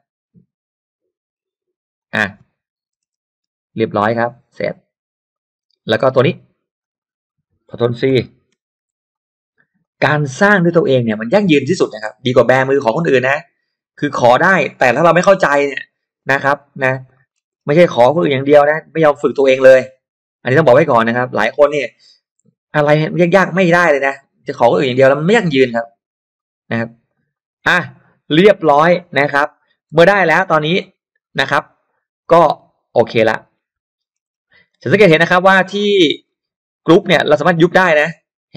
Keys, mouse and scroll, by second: 1.9 click, 3.1 BackSpace, 5.3 click, 6.3 click, 6.8 click, 8.5 ctrl+c, 9.1 click, 9.8 click, 11.4 click, 12.6 ctrl+v, 13.9 click, 15.0 BackSpace, 16.5 click, 16.8 scroll down 1, 17.1-17.8 scroll up 2, 17.1 middle click, 18.8 click, 20.6 click, 21.3 click, 22.7 click, 23.3 click, 23.5 click, 24.5 click, 25.2 click, 26.3 click, 27.1 click, 27.3 click, 30.0 e, 30.2-32.1 drag, 32.5 click, 33.1 space, 33.4-34.3 scroll down 2, 34.7 click, 35.1-35.7 scroll down 2, 35.9-36.5 scroll up 2, 36.9-37.2 scroll down 2, 38.1 click.